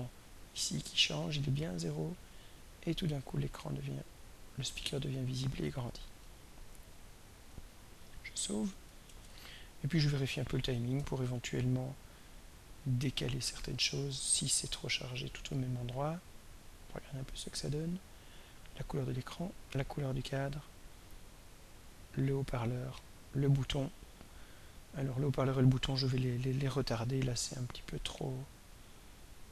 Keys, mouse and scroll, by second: 1.3-5.5 drag, 6.2 click, 7.9 click, 9.0 ctrl+s, 11.5-13.4 ctrl+scroll down 11, 14.1-14.6 ctrl+scroll down 5, 16.6-25.7 drag, 29.3-29.5 drag.